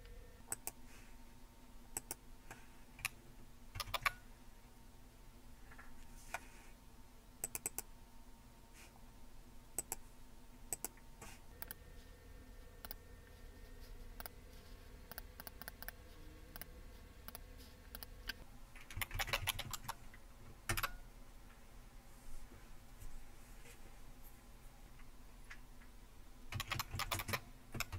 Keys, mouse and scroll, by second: 0.6 click, 2.0 click, 3.8 super+t, 7.5 click, 9.8 click, 10.7 click, 12.8 click, 14.2 click, 15.1 click, 15.4 click, 15.6 click, 15.8 click, 16.6-18.1 drag, 18.7-20.7 typing, 26.3-27.9 typing.